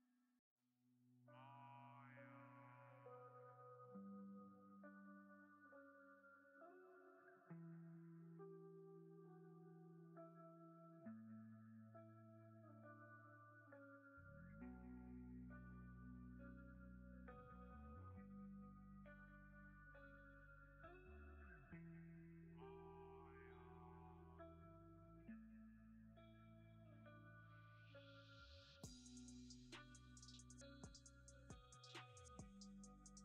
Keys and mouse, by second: 3.8 click, 4.7 g, 5.9 click, 7.6 g, 8.0 click, 10.1 click, 13.0 g, 13.4 click, 14.9 right click, 17.2 shift+a, 19.9 g, 20.1 click, 20.5 shift+right click, 20.9 g, 21.2 click, 21.6 shift+middle click, 21.9 g, 22.1 click, 23.1-25.4 drag, 26.2 click, 30.0 alt+click, 31.1 g, 31.9 g, 32.4 click.